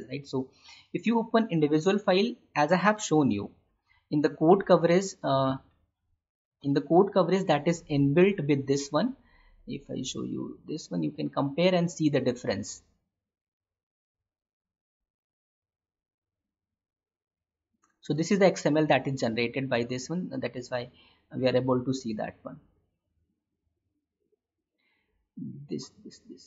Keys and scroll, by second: 5.6 alt+Tab, 17.4 Escape.